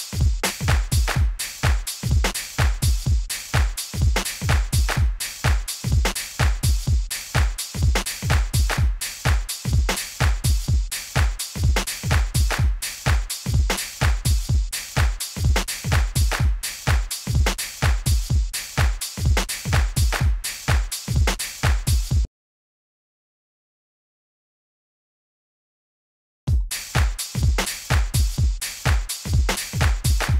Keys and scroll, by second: 0.3 d, 2.2 d, 4.1 d, 6.0 d, 7.9 d, 9.8 d, 14.4 super+u.